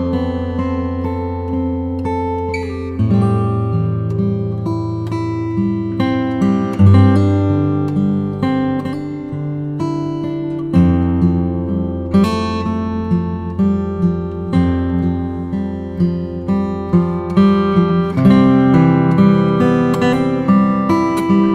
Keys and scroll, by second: 0.4 Down, 2.5 super+m, 8.0 Return, 11.2 z, 12.6 b, 13.5 [, 21.3 z.